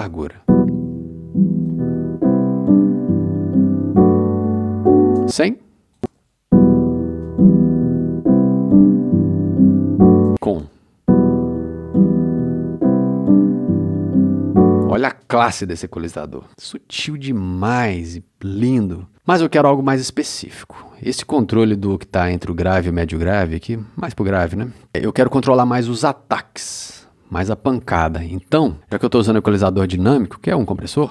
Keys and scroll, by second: 0.0 space, 5.1 space, 10.2 space, 14.8 space.